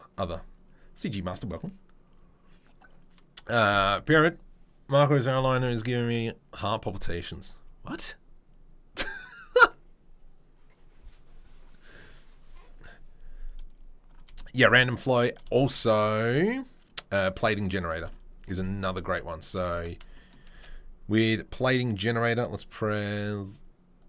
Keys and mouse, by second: 19.0 Tab, 19.5 Tab, 20.5 a.